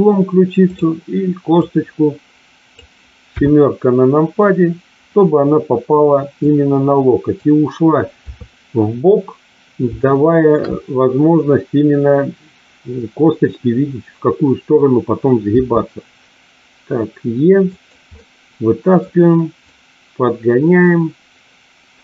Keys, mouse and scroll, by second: 0.5 click, 1.5-2.8 drag, 3.3 KP_7, 6.4 click, 8.2 KP_3, 9.9 shift+middle click, 15.5 e, 17.7 click, 18.0-19.0 middle drag, 19.7-22.0 drag.